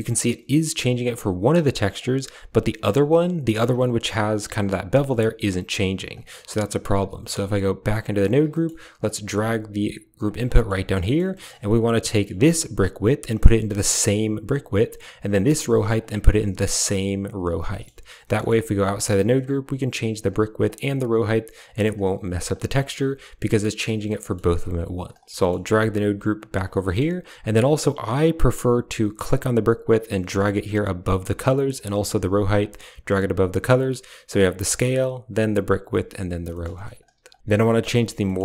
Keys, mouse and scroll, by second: 0.7-1.9 shift+drag, 3.8-5.1 shift+drag, 5.4 shift+click, 6.6 middle click, 7.8 Tab, 8.4 middle click, 9.0 g, 10.4 middle click, 10.5 click, 10.9 middle click, 11.2 middle click, 12.0 middle click, 13.2 click, 13.5-14.6 drag, 15.9-17.3 drag, 17.6 middle click, 18.3 middle click, 18.5 Tab, 19.3 shift+click, 20.5-21.9 shift+drag, 22.7 Tab, 24.1 middle click, 25.0 click, 25.2 middle click, 25.5 g, 26.7 middle click, 29.1-29.5 drag, 29.7 click, 31.9 click, 34.6-35.4 drag, 35.8 click, 36.4 middle click, 36.5 drag, 36.9 click, 37.0 g, 37.8 middle drag, 38.1 middle click.